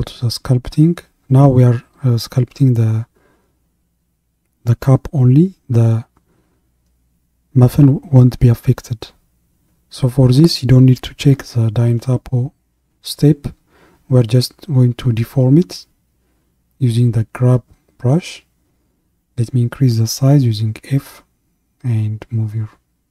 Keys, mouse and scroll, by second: 0.5 click, 3.2-16.9 shift+middle drag, 16.9-19.9 drag, 19.9 f, 22.8-23.1 scroll up 2.